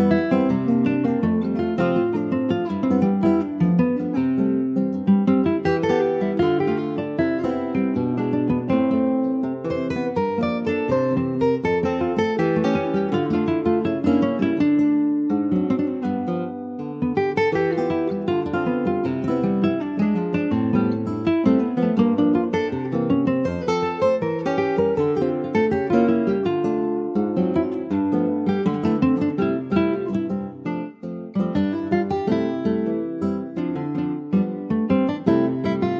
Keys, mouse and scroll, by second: 3.3 scroll down 1, 3.4 middle click, 4.0 scroll down 2, 4.4 middle click, 5.0 Tab, 5.5 click, 5.7-6.0 scroll down 2, 6.1 middle click, 6.3-7.3 scroll up 2, 7.3 ctrl+z, 7.8 ctrl+z, 9.1 middle click, 9.6 Tab, 9.9 click, 10.5 ctrl+s, 10.6 click, 10.9 Tab, 11.4-13.1 middle drag, 13.1 Tab, 13.7 middle click, 14.5 ctrl+s, 14.6 click, 14.9 Tab, 15.4-17.4 middle drag, 17.4-17.7 scroll up 1, 17.7 middle click, 18.5 click, 19.3 alt+shift+click, 20.5 c, 23.1 Tab, 23.8 Tab, 24.1 3, 24.4 click, 25.4 2, 25.6 click, 26.2-27.3 middle drag, 27.3 shift+click, 27.7 middle click, 28.3 ctrl+b, 30.4 click, 30.7-31.7 middle drag, 31.7 shift+click, 32.1-33.3 middle drag, 33.3 shift+click, 33.7 middle click, 34.3 ctrl+b.